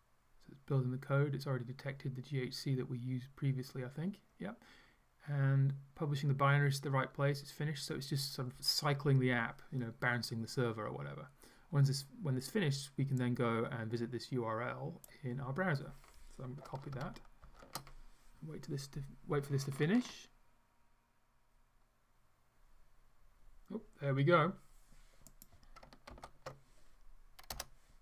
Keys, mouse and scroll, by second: 13.2-15.3 drag, 17.4 ctrl+shift+c, 25.4 click, 26.2 ctrl+v, 27.7 Return.